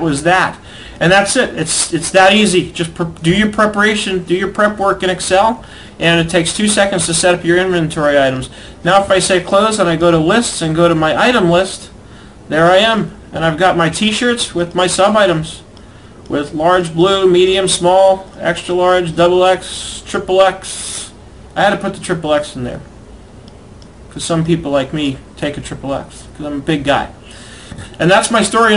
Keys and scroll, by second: 2.9 alt+Tab.